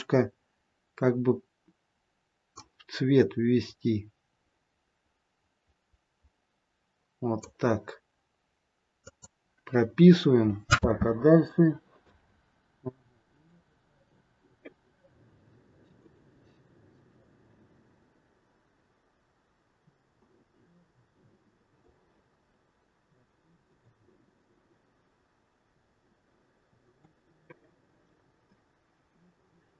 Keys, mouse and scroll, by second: 10.7 space, 12.0 space, 13.3 click, 16.0 click, 26.8 click, 28.5 click.